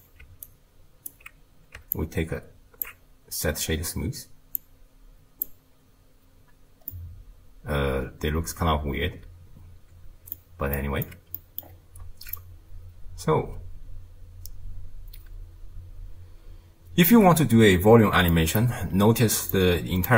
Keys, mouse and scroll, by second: 0.5-2.0 alt+right drag, 2.0 alt+click, 4.6 click, 6.9-10.0 middle drag, 10.8 middle click, 11.6-12.4 scroll up 1, 12.4-15.7 shift+drag, 18.3 middle click, 18.9-19.5 scroll down 4, 19.5 click.